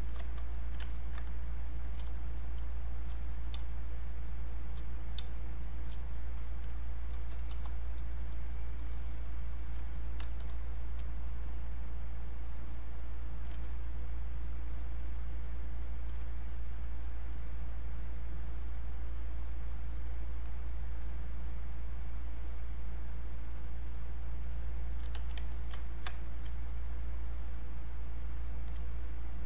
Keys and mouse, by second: 0.9 ctrl+right click, 1.3 click, 2.1 space, 3.3 click, 3.6 space, 4.0 click, 5.6 click, 5.7 space, 6.6 click, 7.5 r, 9.4 alt+click, 12.3-15.0 alt+drag, 15.0-25.1 alt+drag, 25.1 q, 25.5 alt+click, 25.9 ctrl+right click, 26.3 alt+click, 27.0 alt+click, 27.7 alt+click.